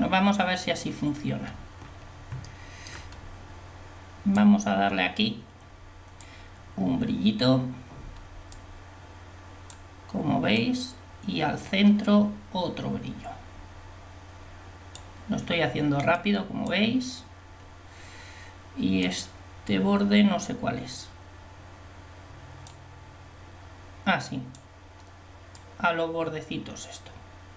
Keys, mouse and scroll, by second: 4.6-6.2 drag, 8.6-9.7 drag, 10.7-12.4 drag, 16.4-18.9 drag, 19.0-20.0 drag, 24.5 click.